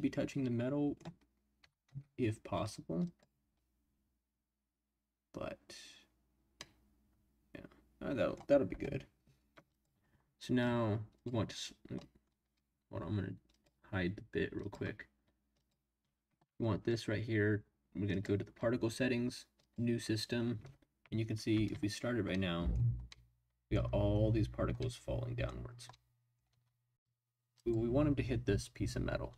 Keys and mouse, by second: 1.6 g, 1.8 z, 3.0 click, 6.6-8.5 middle drag, 9.7 click, 12.0 middle click, 13.5 click, 14.6 click, 18.1 click, 19.6 click, 21.5 space, 23.1-23.7 middle drag, 24.8-25.4 middle drag, 25.9-26.4 middle drag, 26.5 space, 27.5 click.